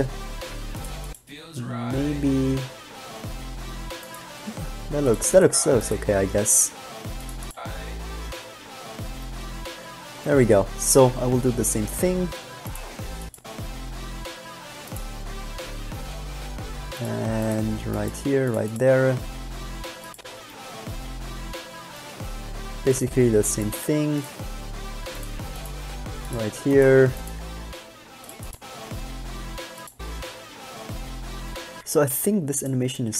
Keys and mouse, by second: 0.0 g, 4.4 g, 7.0 g, 11.4 g, 13.4 click, 15.4 g, 20.0 click, 23.8 g, 25.8 g, 27.6 g, 31.9 alt+a.